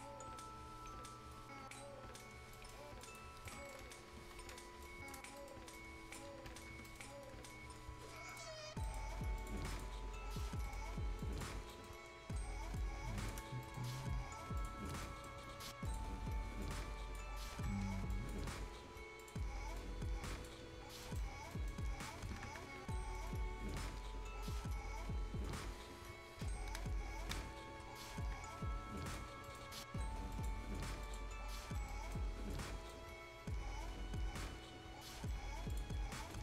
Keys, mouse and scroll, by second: 1.6 scroll down 1, 2.1 scroll up 1, 2.5 right click, 2.8 scroll up 1, 3.0 click, 3.3 scroll down 1, 3.5 right click, 4.3 F10, 4.8 click, 5.3 scroll up 1, 5.4 right click, 5.8 click, 6.3 scroll down 2, 6.5 Escape, 6.6 Escape, 6.9 right click, 7.0-8.3 scroll up 2, 7.1 middle click, 8.3 click, 10.1 scroll down 1, 10.4 scroll up 1, 10.6 right click, 10.9 scroll down 1, 11.2 click, 11.6 scroll up 1, 11.7 right click, 12.1 scroll down 1, 12.8 shift+click, 13.4 shift+scroll up 1, 13.6 right click, 14.0-14.6 scroll up 1, 14.6 shift+click, 14.9 shift+scroll up 1, 15.0 right click, 15.9 click, 16.2 scroll up 1, 16.6 click, 17.5 scroll down 1, 17.6 Escape, 17.8 scroll up 1, 18.1 click, 18.5-18.8 scroll up 1, 19.2 click, 19.5 scroll up 1, 19.8 click, 20.6 scroll down 1, 21.0 right click, 21.2-21.5 scroll down 1, 21.5 right click, 21.9-22.7 scroll up 3, 22.3 Escape, 22.5 Escape, 23.2 middle click, 23.2-25.4 scroll up 1, 29.1 click, 29.3 scroll down 1, 29.4 right click, 29.7-30.2 scroll up 1, 30.3 click, 31.3-31.7 scroll down 1, 31.9 right click, 32.2-32.5 scroll down 1, 32.5-35.4 right drag, 35.7 click, 36.3 right click.